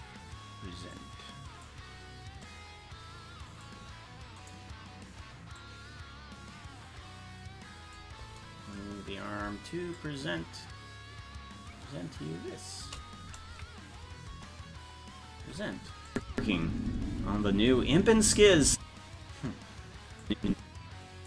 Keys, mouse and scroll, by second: 1.0 click, 2.5-3.7 drag, 4.5 right click, 5.6-8.0 drag, 10.0-12.9 shift+drag, 13.5 KP_Decimal, 14.3 KP_0, 16.1 click, 16.3 space, 20.3-21.2 drag.